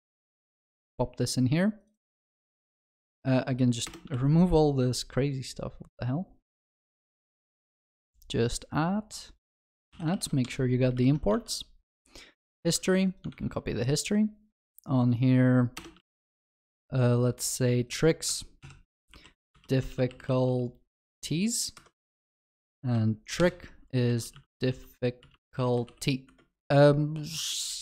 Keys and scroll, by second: 4.2 ctrl+s, 10.2 ctrl+s, 10.9 ctrl+alt+shift+l, 11.4 ctrl+s, 12.7 ctrl+c, 16.1 ctrl+s, 18.6 ctrl+alt+shift+j, 21.7 Escape, 23.4 ctrl+alt+shift+j, 26.7 ctrl+s.